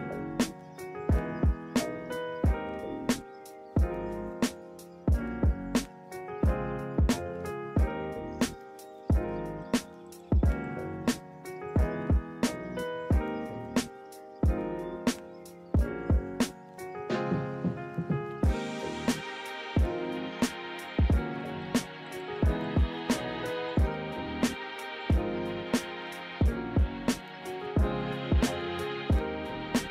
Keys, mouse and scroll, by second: 4.8 ctrl+z, 5.6 ctrl+z, 6.0 ctrl+-, 6.3 ctrl+=, 7.9 ctrl+-, 8.7 ctrl+=, 14.4 ctrl+z, 16.6 ctrl+z, 17.1 ctrl+-, 17.5 ctrl+=, 18.7 ctrl+z.